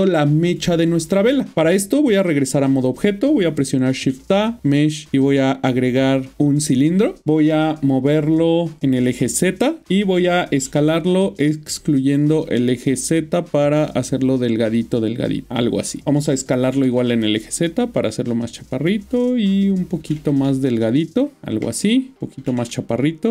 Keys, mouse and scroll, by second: 1.1 middle click, 1.7 Tab, 3.9 typing, 7.0 click, 8.8-9.1 typing, 9.8 click, 12.1 typing, 14.4 click, 16.6 typing, 20.0 typing, 21.4 ctrl+middle click, 22.4 typing.